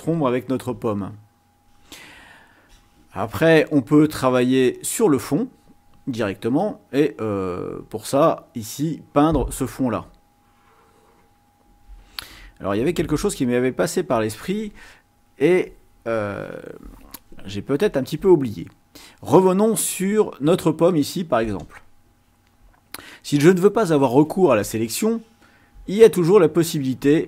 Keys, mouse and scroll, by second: 3.6 ctrl+scroll down 2, 8.4-11.6 drag, 13.1 ctrl+scroll up 2, 21.6 click.